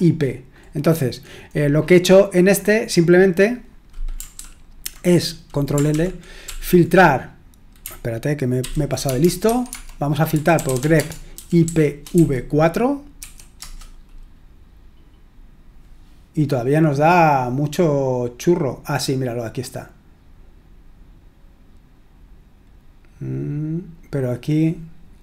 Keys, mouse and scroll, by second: 1.2-3.2 scroll down 1, 4.3 ctrl+p, 5.9 ctrl+l, 6.4 ctrl+p, 8.6 ctrl+n, 9.0-14.0 typing, 17.2-18.1 scroll up 1, 18.4-19.3 scroll down 1.